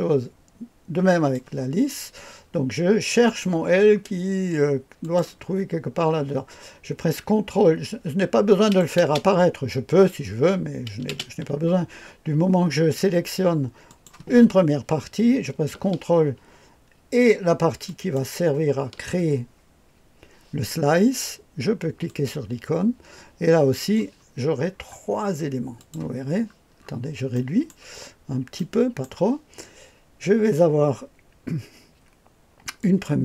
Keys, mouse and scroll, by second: 3.2 click, 3.6-4.2 scroll down 1, 5.0 click, 5.4-6.1 scroll down 1, 8.6 click, 9.0 space, 11.1 space, 13.8 click, 14.3 click, 17.9 ctrl+click, 22.0 click, 23.7-24.6 scroll down 1, 24.6-25.7 scroll down 1, 25.7 click, 26.3-27.3 scroll down 1, 27.3 right click, 27.9-29.0 scroll up 1, 28.5-29.0 right drag, 32.8 click.